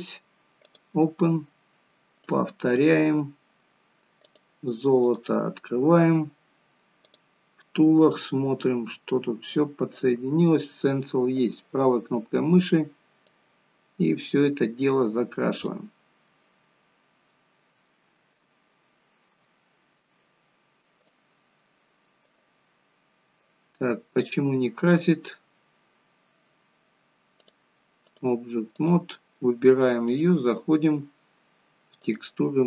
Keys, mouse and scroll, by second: 2.0 click, 7.1 click, 7.9-8.3 scroll down 5, 8.6-9.8 scroll down 8, 11.4 right click, 13.3 click, 16.3 middle click, 17.9 shift+middle click, 18.7 scroll up 3, 19.6 shift+middle click, 21.2 click, 23.9 scroll down 2, 24.4-24.9 scroll up 2, 26.9 scroll up 1, 27.5 click, 28.8 click.